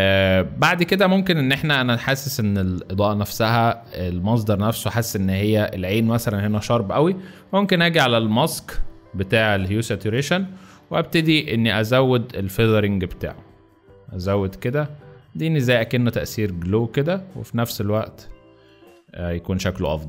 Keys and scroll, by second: 3.5 z.